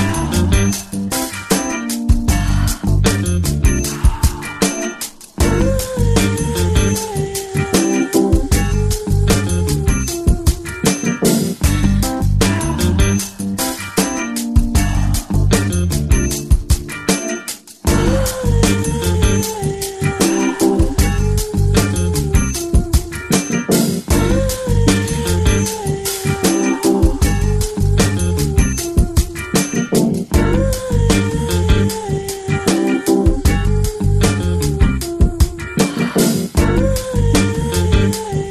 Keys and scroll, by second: 30.0 ctrl+g, 32.8 [, 33.3 [, 35.2 [, 36.3 x.